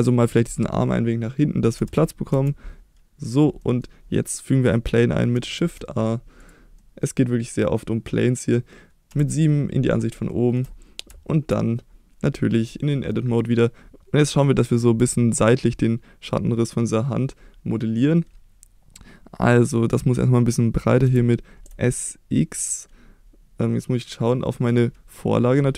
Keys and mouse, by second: 1.8 g, 2.3 y, 3.3 click, 3.6 middle drag, 5.6 shift+a, 6.8 middle click, 9.1 KP_7, 10.3 shift+middle drag, 11.1 Tab, 14.0 s, 15.0 s, 16.2 click, 21.0 s, 21.6 x, 24.7 click.